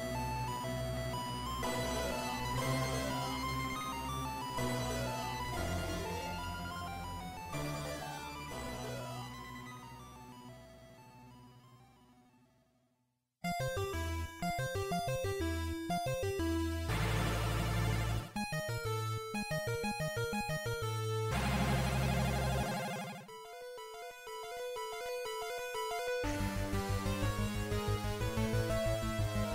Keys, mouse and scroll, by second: 3.6 click, 5.4 g, 10.2 click, 11.0 g, 13.8 click, 18.0 Tab, 18.6-19.4 scroll down 2, 19.8 scroll down 1, 20.4-20.8 scroll down 2, 21.0 middle click, 23.2 KP_5, 24.2-24.8 scroll down 1, 25.0 scroll down 1, 26.4-26.8 scroll down 2, 26.4 KP_5, 27.2 scroll down 1, 28.2 scroll down 1, 29.2 middle click.